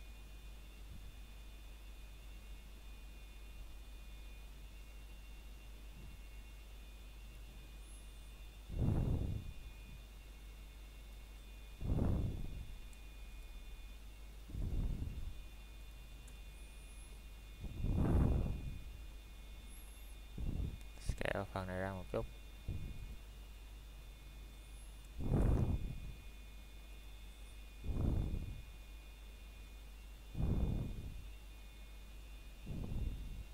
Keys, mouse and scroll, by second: 0.9 o, 7.7 s, 9.6 Escape, 10.0-11.3 scroll down 1, 11.3 click, 12.5-13.1 scroll down 1, 28.9 middle click, 30.2 scroll up 1, 30.7 middle click, 31.5 alt+click, 31.8 middle click.